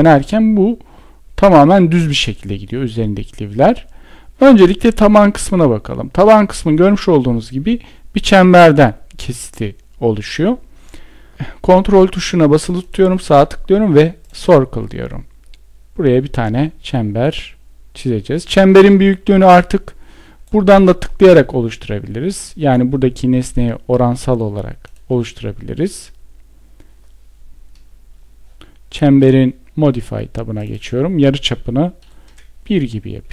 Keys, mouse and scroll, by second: 12.2 ctrl+right click, 13.6 ctrl+click, 31.6 Return.